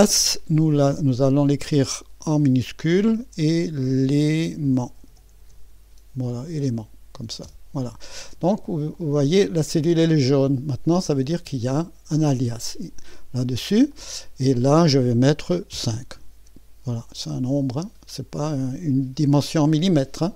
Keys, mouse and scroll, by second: 3.0-6.5 typing, 7.4 Return, 8.9-12.1 drag, 13.9 click, 17.3 click.